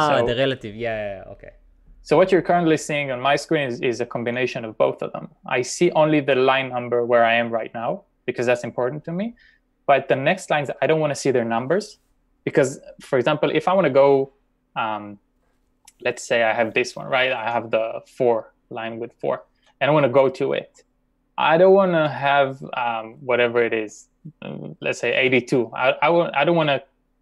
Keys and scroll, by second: 5.6 j, 6.1 j, 8.4 k, 16.6 typing, 18.9-19.6 typing, 23.9 k.